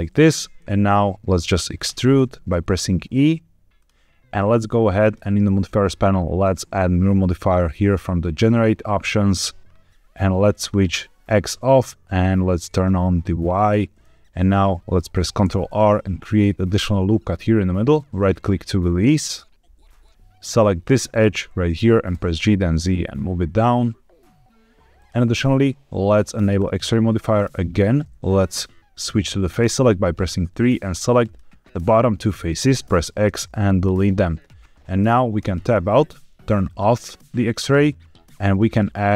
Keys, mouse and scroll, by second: 0.5 middle click, 1.8 e, 3.7 click, 4.9-8.4 drag, 10.5 click, 12.6 click, 15.3 ctrl+r, 18.2 right click, 19.0 middle click, 20.0 click, 22.3 g, 22.3 z, 24.9 click, 26.5 click, 27.0 middle click, 29.4 3, 30.3 click, 32.3 middle click, 32.8 x, 35.3 Tab, 36.6 click, 38.4-39.1 drag.